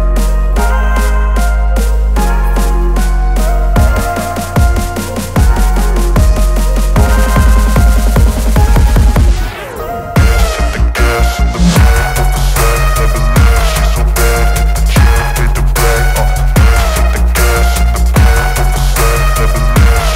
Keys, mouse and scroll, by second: 2.2-3.0 typing, 4.8-9.0 drag, 15.3 Return, 16.8-20.1 drag.